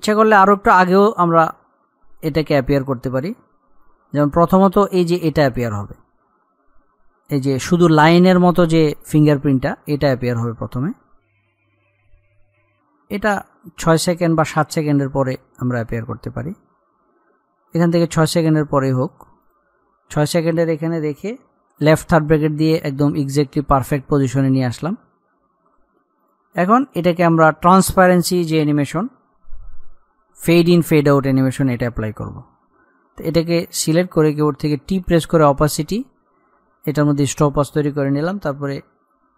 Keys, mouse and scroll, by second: 1.5 scroll down 1, 2.4-9.2 drag, 9.8 click, 19.2 click, 21.7 [, 24.6 click, 25.2-26.2 scroll down 1, 26.4 click, 33.4 click, 34.8 t, 36.0 click.